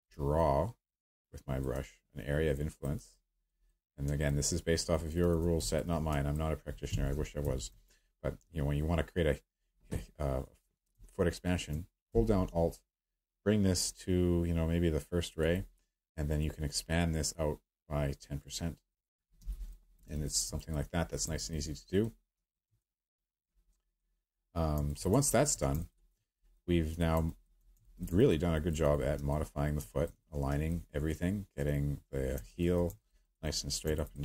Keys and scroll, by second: 6.9 w, 19.4 q.